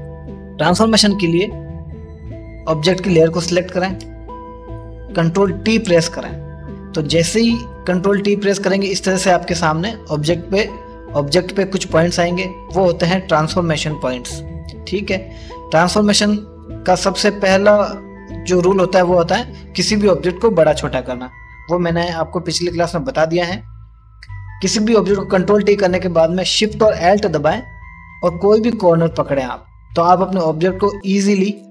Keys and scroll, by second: 4.9-5.7 typing.